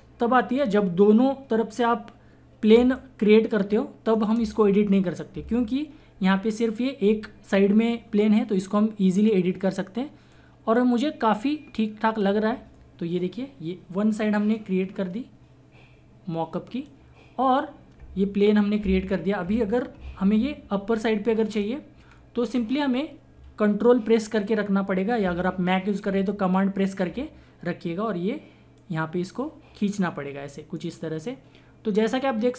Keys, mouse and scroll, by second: 2.7 space, 2.9 click, 3.2 space, 10.3-14.4 drag, 14.5-19.3 drag, 20.0 click, 20.1 ctrl+-, 21.5-22.1 scroll up 1, 22.1 scroll down 1, 27.1-27.6 scroll down 1, 28.7-32.5 ctrl+drag.